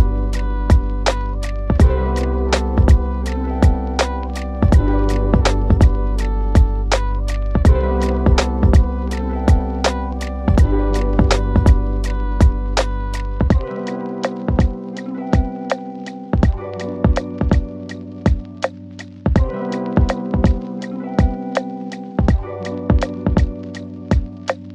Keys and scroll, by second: 0.7-1.6 typing, 2.6 shift+Page_Up, 4.6-5.6 typing, 20.6-21.5 typing.